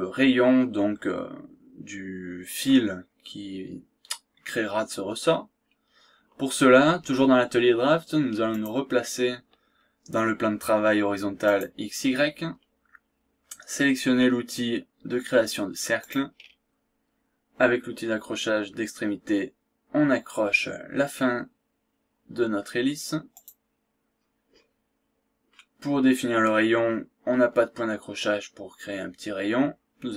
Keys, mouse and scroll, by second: 3.6 scroll down 1, 4.1-4.4 scroll up 2, 4.6 scroll down 2, 5.0-5.4 scroll up 2, 5.6-6.0 scroll down 2, 8.5 click, 11.4 click, 12.3 scroll down 1, 12.6 scroll up 1, 16.0 click, 21.4-21.7 scroll up 1, 23.4 click, 24.2-24.5 scroll up 1, 24.5-25.0 scroll down 1, 25.5 scroll down 2, 27.6-28.0 scroll up 2, 28.1 scroll down 2.